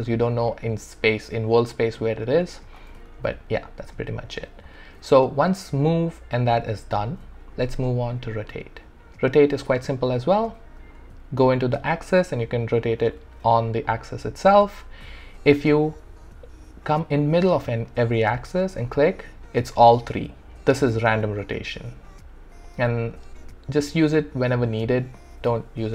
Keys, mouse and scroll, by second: 0.5-3.1 drag, 3.1 ctrl+z, 4.8 ctrl+z, 6.6 ctrl+z, 8.2-11.0 drag, 11.0 ctrl+z, 11.8-13.2 drag, 13.2 ctrl+z, 13.9 click, 14.6 ctrl+z, 18.6-25.9 drag.